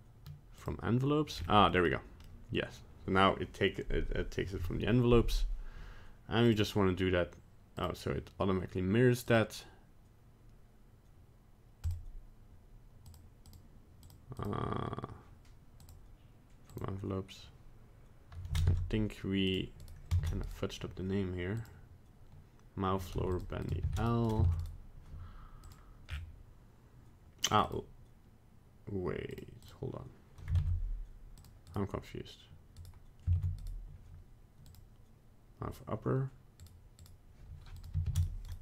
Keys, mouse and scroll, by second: 1.3 scroll up 4, 1.7 middle click, 1.8 middle click, 1.8 scroll down 2, 2.3 middle click, 6.5 click, 7.8 click, 9.3 click, 13.1 click, 14.0 click, 15.8 click, 18.7 ctrl+Tab, 19.8 right click, 20.2 ctrl+Tab, 20.5 right click, 21.6 click, 23.3 click, 23.6 click, 24.3 right click, 24.5 ctrl+Tab, 24.6 right click, 25.6 click, 26.1 scroll down 5, 27.5 click, 27.6 click, 29.6 click, 30.6 ctrl+Tab, 31.7 right click, 32.8 right click, 33.4 ctrl+Tab, 33.6 right click, 34.7 click, 36.6 right click, 37.0 right click, 37.8 click, 38.5 right click.